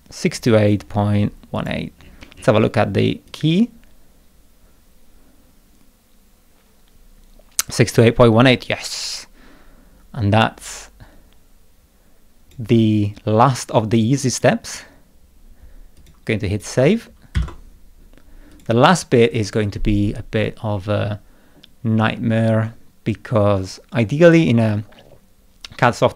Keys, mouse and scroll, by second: 1.5 click, 1.9-2.6 scroll down 4, 3.3-12.5 drag, 12.8 middle click, 14.1 click, 15.9 click, 16.5 click, 17.3 ctrl+s, 18.5 click, 18.9-20.5 scroll down 8, 20.8-21.3 scroll down 2, 22.5 middle click.